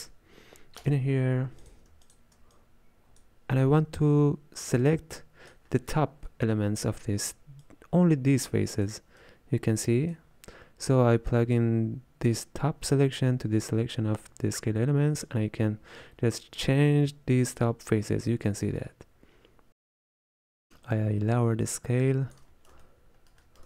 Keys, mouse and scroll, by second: 2.1 alt+shift+click, 4.9-5.6 drag, 7.7-13.7 drag, 15.5-18.3 shift+drag, 21.2-22.8 shift+drag, 22.8-23.6 ctrl+middle drag.